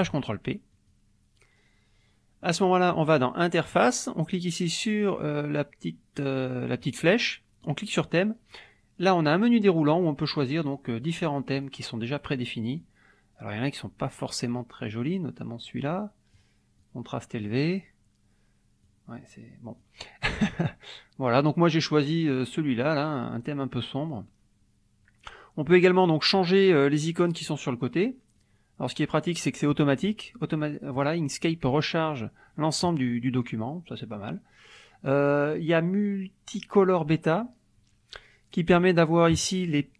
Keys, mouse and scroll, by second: 0.0 click, 0.9 click, 2.4-3.1 drag, 3.7 click, 6.8 click, 7.6 click, 8.5-10.0 drag, 10.8 click, 11.6 click, 12.8-16.5 drag, 16.8-17.9 drag, 18.8-20.0 drag, 21.4-23.3 drag, 28.4-29.7 drag, 33.9-37.5 drag, 38.7 click.